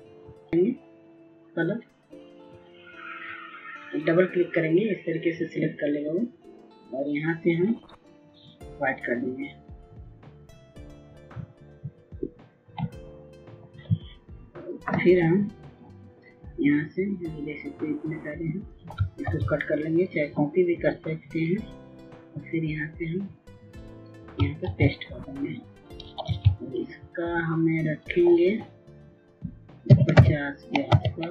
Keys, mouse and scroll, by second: 0.1 right click, 12.1 right click, 12.8-19.8 drag, 20.2 ctrl+x, 21.0-25.1 drag, 25.6 ctrl+v, 27.3 ctrl+a, 29.1 click, 30.9 KP_5, 31.2 KP_0.